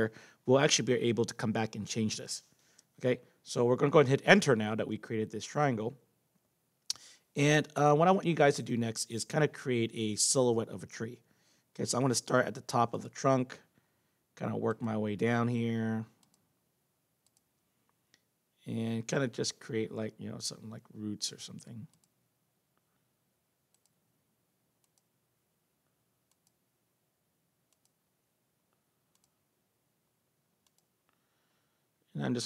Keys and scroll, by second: 4.7 Return.